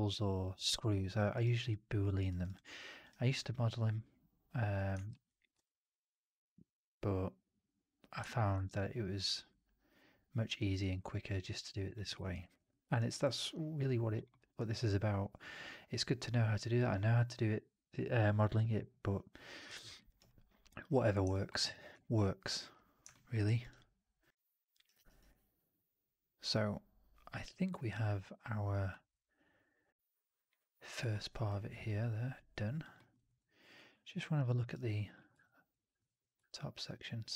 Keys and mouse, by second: 0.9 alt+middle drag, 1.1 alt+drag, 1.3 alt+right drag, 1.6-1.9 alt+drag, 2.1 alt+right drag, 2.3 alt+right drag, 2.4-2.9 alt+drag, 3.0 alt+right drag, 3.3-4.6 alt+drag, 5.0 shift+x, 5.5-8.0 alt+drag, 8.2 shift+x, 8.5 alt+right drag, 8.9 alt+right click, 9.4-10.4 alt+drag, 10.5 alt+right drag, 10.7 alt+right drag, 10.8-11.8 alt+drag, 11.9 alt+middle drag, 12.1 alt+right drag, 12.3 alt+drag, 12.6 alt+middle drag, 12.8 alt+right drag, 13.0-14.0 alt+drag, 14.2 alt+middle drag, 14.4 alt+right drag, 14.7-16.7 alt+drag, 19.9 alt+right drag, 20.1 alt+right click, 20.2-20.7 alt+drag, 21.2 alt+middle drag, 21.4 alt+right drag, 23.0 alt+middle drag, 23.2 alt+right drag, 23.5 alt+right drag, 23.6-24.6 alt+drag, 24.7 alt+right drag, 24.9 alt+right click, 25.2-27.3 alt+drag, 27.8-28.8 alt+middle drag, 29.0-31.0 alt+middle drag, 31.1 alt+right drag, 31.3-32.7 alt+drag, 32.8 alt+middle drag, 33.0 alt+right drag, 33.3-33.6 alt+drag.